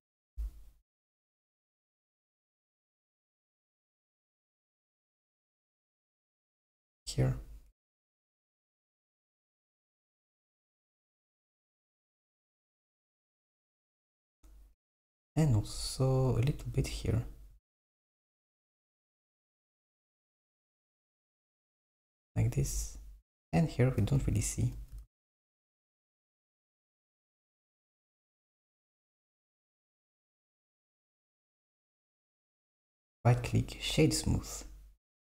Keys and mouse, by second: 0.5-1.5 super+middle drag, 1.6-3.3 super+middle drag, 3.3 KP_3, 8.5 click, 8.9 alt+click, 9.8 g, 12.8 super+middle click, 16.3 click, 16.9 alt+click, 17.9 click, 18.3 alt+click, 19.4 g, 25.2 s, 29.8 click, 30.5 click, 31.7 Tab, 32.9-35.3 right drag.